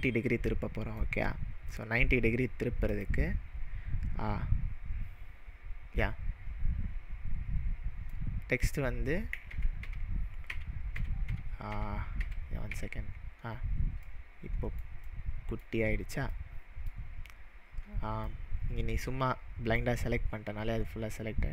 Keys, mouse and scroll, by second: 0.5-1.0 middle drag, 1.1-2.8 scroll up 3, 2.9-6.0 drag, 8.1-8.7 middle drag, 9.5 ctrl+z, 11.1 ctrl+z, 12.6-14.8 ctrl+z, 13.5-14.0 scroll down 1, 14.0-14.9 middle drag, 15.6-16.9 middle drag, 17.1-18.2 scroll up 1, 18.2 scroll up 3, 18.3-19.8 drag.